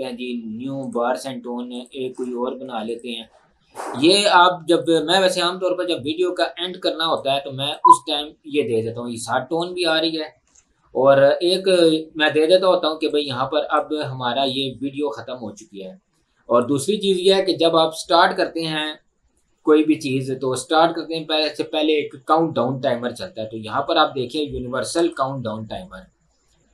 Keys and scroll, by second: 10.5 Delete.